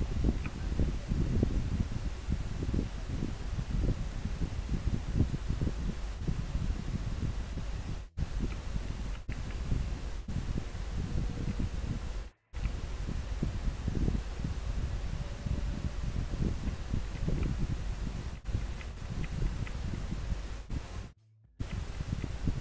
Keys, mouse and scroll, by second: 12.4 scroll down 1, 17.2 scroll down 1, 18.3 scroll down 1, 18.8 scroll up 1, 19.2 scroll down 1, 21.7 scroll up 1.